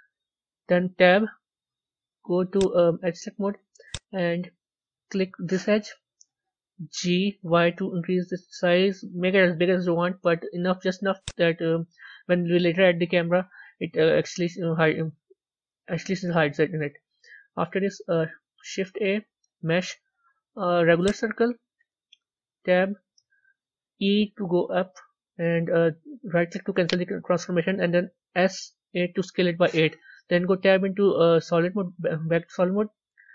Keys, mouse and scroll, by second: 0.9 Tab, 2.4-3.8 drag, 4.8-7.0 middle drag, 7.0 g, 15.1 Tab, 16.5 scroll up 3, 21.0 shift+a, 22.2 Tab, 22.8 scroll up 4, 23.9 e, 28.9 s, 31.4 Tab.